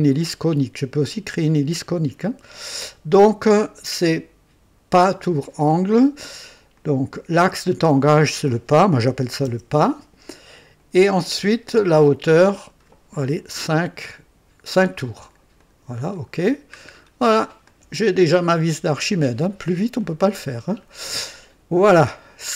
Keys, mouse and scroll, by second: 5.0 click, 6.7-8.1 drag, 9.1 KP_6, 9.4 KP_0, 10.8 click, 11.8 click, 13.4 KP_5, 15.6 click, 16.3-16.9 scroll down 1, 17.2 scroll down 1, 17.7-19.9 drag, 20.0-20.6 right drag, 20.8 scroll up 1, 21.4 right click, 22.4-22.5 drag.